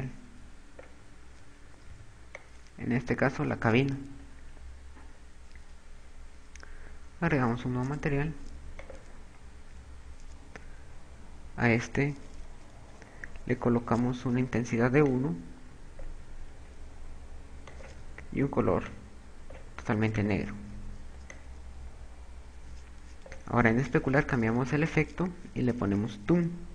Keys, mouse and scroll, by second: 2.3 b, 7.5 click, 8.6 click, 15.6 click, 17.8 click, 21.5 click, 24.6 click.